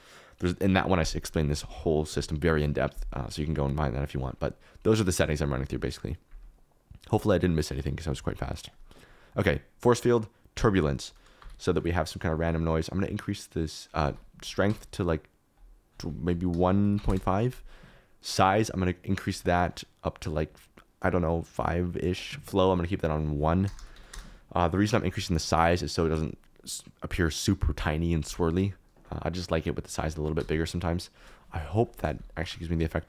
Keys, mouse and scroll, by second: 11.4 g, 11.7 click, 13.0 click, 14.1 ctrl+z, 14.5-21.7 drag, 16.4 BackSpace, 22.4-26.8 drag, 23.7 BackSpace, 30.3 KP_0, 31.1 click, 32.4 shift+Left.